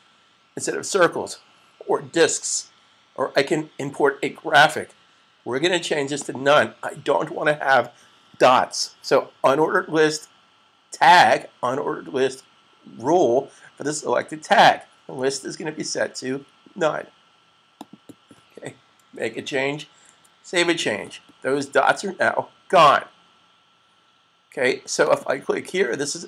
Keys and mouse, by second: 6.1 click, 17.8 click, 19.7 super+s, 24.9 click.